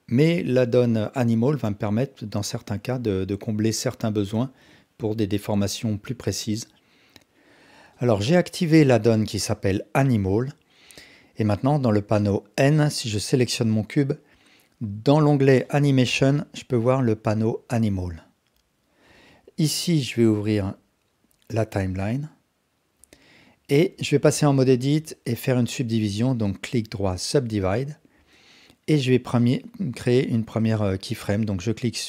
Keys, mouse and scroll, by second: 1.6 click, 2.7 shift+d, 4.9-5.3 drag, 6.5 shift+d, 11.8 n, 15.6 click, 24.0 Tab, 24.5 alt+click, 25.5-27.6 right drag, 28.3 alt+click.